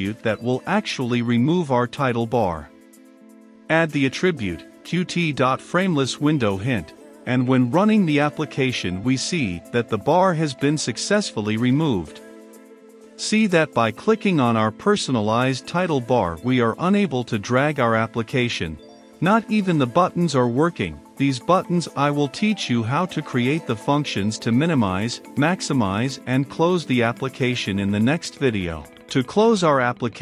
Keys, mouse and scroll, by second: 2.2 space, 4.6-5.8 drag, 5.8 space, 6.4 shift+q, 6.7 t, 7.8-9.2 typing, 9.6-30.2 drag.